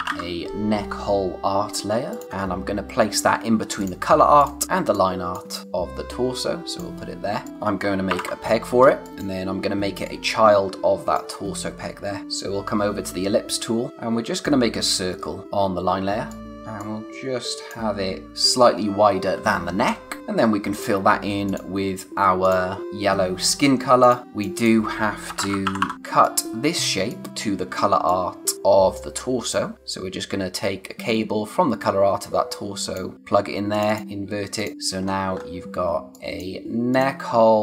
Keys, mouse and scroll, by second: 0.0-0.6 typing, 2.3-3.8 scroll up 1, 3.8 click, 7.3 space, 7.4 click, 8.1 ctrl+p, 8.8 space, 9.0 click, 11.7-12.2 scroll down 1, 12.2 click, 15.4 click, 16.3 click, 18.2 Right, 20.2 click, 24.4-26.3 typing, 24.6 click, 25.9 click, 27.9 space, 28.0 click, 28.4 space, 29.7 click, 34.7 scroll down 1, 35.0-35.3 scroll up 1, 35.9 space, 36.1 click, 36.4 space, 36.9 click.